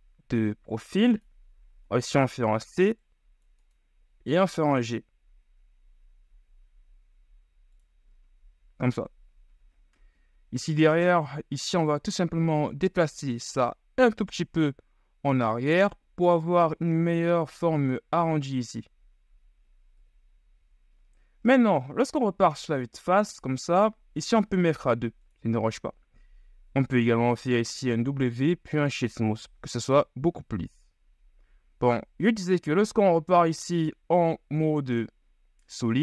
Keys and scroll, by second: 2.9 [, 3.1 c, 4.1 g, 12.0 c, 13.6 g, 20.3 KP_1, 20.7 z, 22.9 Tab, 28.3 w.